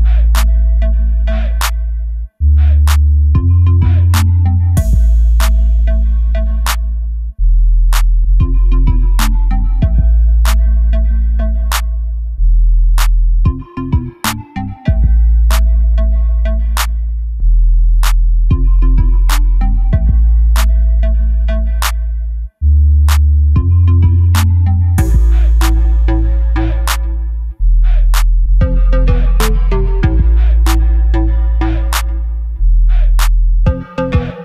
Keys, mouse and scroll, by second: 0.7 scroll up 1, 1.2 scroll up 1, 4.6 click, 5.0 scroll down 1, 5.3 middle click, 6.2 scroll up 1, 6.5 middle click, 7.8 KP_1, 8.3 scroll down 1, 8.7 shift+KP_1, 9.4 ctrl+KP_3, 10.0 ctrl+KP_2, 10.8 ctrl+KP_4, 11.0 ctrl+KP_1, 11.3 ctrl+KP_2, 11.6 ctrl+KP_3, 12.0 middle click, 16.9 click, 17.3 Tab, 18.3 2, 18.7 click, 20.3 KP_Decimal, 20.8-32.9 middle drag, 22.6 shift+d, 24.6 Escape, 32.9 click, 33.2-34.4 middle drag.